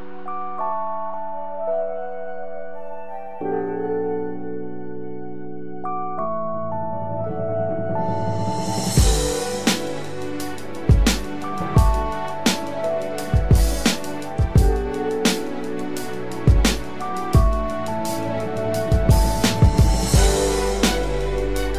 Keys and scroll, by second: 7.8 ctrl+-, 11.8 ctrl+=.